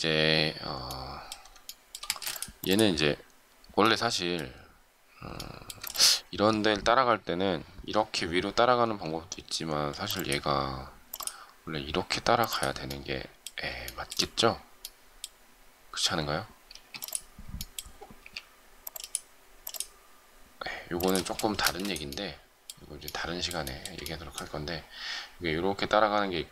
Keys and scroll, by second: 2.0 shift+space, 8.8 q, 16.7 space, 18.2 q, 21.6 space.